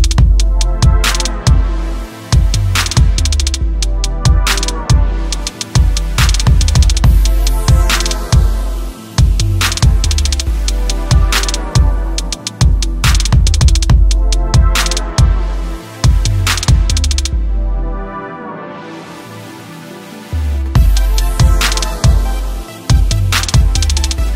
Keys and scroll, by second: 15.8 ctrl+j.